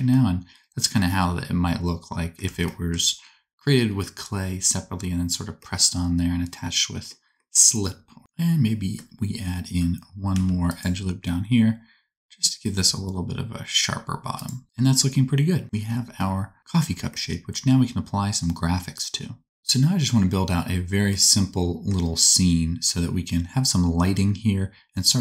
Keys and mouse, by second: 8.2 Tab, 10.3 ctrl+r, 14.6 Tab, 14.9-25.2 drag.